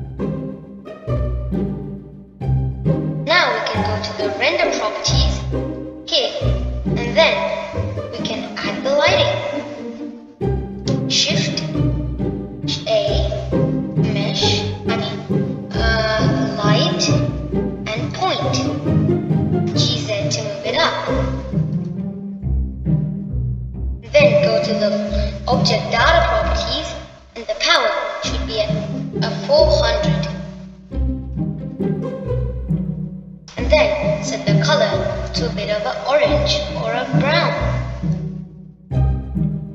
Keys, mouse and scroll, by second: 0.9-6.8 middle drag, 6.8 click, 7.6-9.5 middle drag, 9.5-10.0 scroll up 1, 10.5-13.5 middle drag, 14.6 shift+a, 21.5 g, 28.0 click, 29.5-32.6 drag, 34.2-36.1 middle drag, 36.1 click.